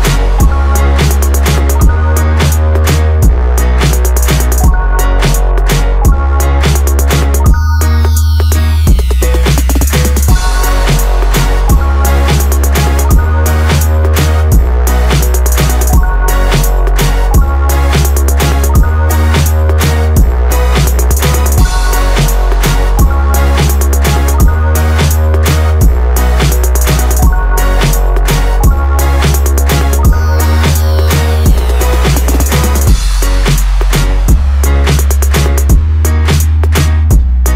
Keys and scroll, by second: 16.5 ctrl+t.